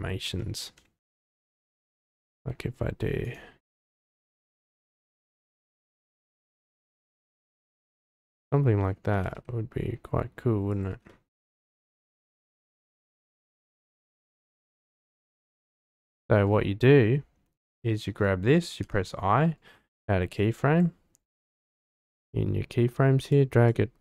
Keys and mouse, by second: 0.4 shift+drag, 1.0 r, 1.2 z, 1.4 z, 3.6 r, 5.0 x, 5.2 x, 8.3-8.9 drag, 9.1 g, 9.2 x, 11.1 click, 11.7 r, 11.8 x, 12.0 x, 16.1 middle click, 18.9 i, 20.3-20.8 drag, 21.3-21.7 drag, 22.0 g, 23.7-24.0 drag.